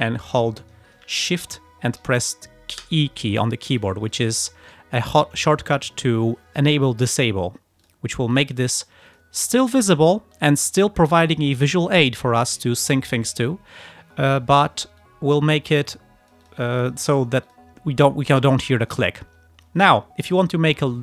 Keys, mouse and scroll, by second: 2.9 shift+e, 3.9 click, 4.2 click, 4.5 click, 4.7 right click, 7.9 click, 8.4 click, 8.8 click, 9.2 click, 10.4-11.6 drag, 11.9 ctrl+scroll up 2, 12.9 click, 14.0 ctrl+scroll down 2, 15.1-16.7 drag, 16.7 ctrl+scroll up 2, 17.5 ctrl+click, 17.9 ctrl+scroll down 2, 18.5 ctrl+click, 18.9 ctrl+click.